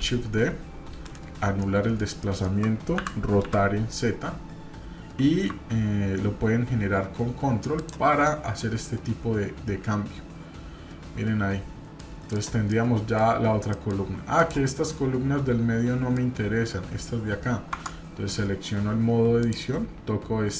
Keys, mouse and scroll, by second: 1.6-2.0 middle drag, 2.2-2.6 shift+middle drag, 3.0 r, 8.2-12.1 middle drag, 12.3 click, 12.7-13.2 middle drag, 13.3-13.7 scroll up 2, 13.7 middle click, 14.4 click, 14.8-16.2 middle drag, 17.7 Tab, 19.4 click.